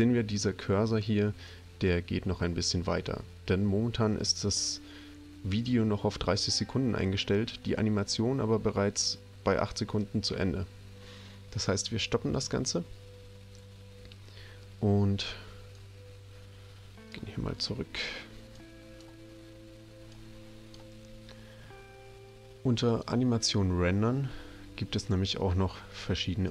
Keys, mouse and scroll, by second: 12.3 click, 15.7-17.1 drag, 18.5 click, 20.0 click, 22.9 click.